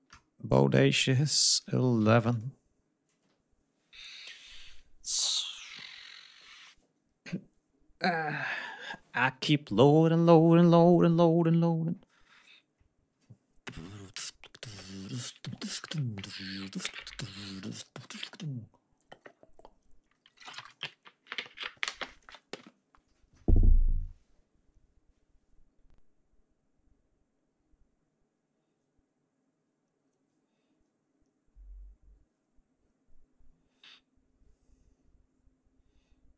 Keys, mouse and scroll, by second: 0.5 scroll down 1, 1.3 click, 2.0 click.